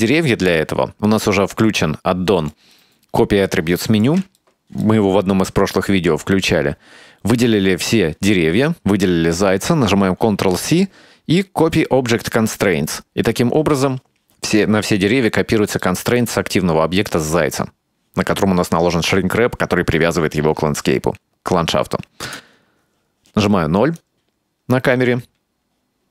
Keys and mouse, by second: 0.0-0.6 shift+middle drag, 2.0-2.7 middle drag, 2.9-4.1 shift+middle drag, 4.4-5.4 ctrl+middle drag, 5.8 shift+middle click, 9.0 shift+right click, 10.4 ctrl+c, 15.9-16.3 middle drag, 22.3 KP_0, 24.1-26.1 drag.